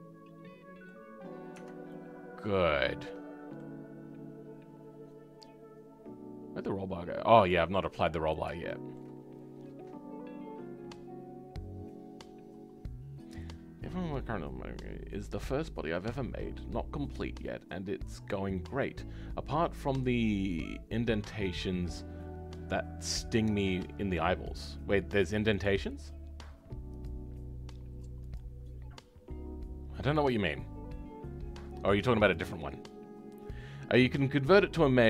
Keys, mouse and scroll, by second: 1.1-1.5 scroll up 2, 1.5 Tab, 1.8 scroll up 1, 1.9-7.3 middle drag, 7.3-8.6 drag, 8.6-35.0 shift+middle drag.